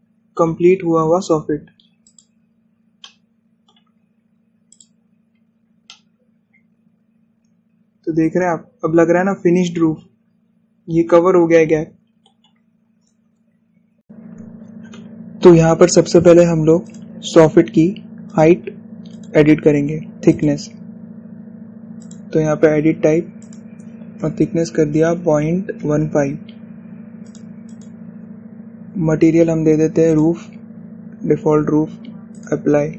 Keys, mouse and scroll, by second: 1.7 scroll down 1, 3.2 click, 3.7-4.0 scroll down 1, 4.1 shift+middle click, 5.0 scroll up 1, 5.8 click, 6.4 scroll down 1, 6.7 scroll up 1, 7.0-14.0 shift+middle drag, 17.6 click, 28.0 click.